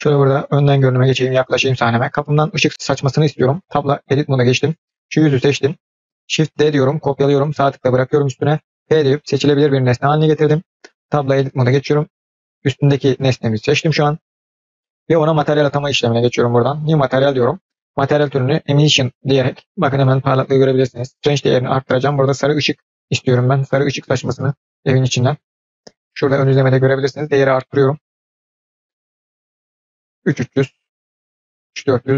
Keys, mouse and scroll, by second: 0.6-1.2 scroll up 6, 1.2 scroll down 1, 1.2-2.2 middle drag, 2.2 click, 3.5 Tab, 4.5 click, 6.7 shift+d, 8.5 p, 10.8 Tab, 11.5 click, 11.9 click, 15.7 click, 16.6-16.9 drag, 17.8-19.6 drag, 21.8 click, 27.1-30.2 drag, 31.5 click.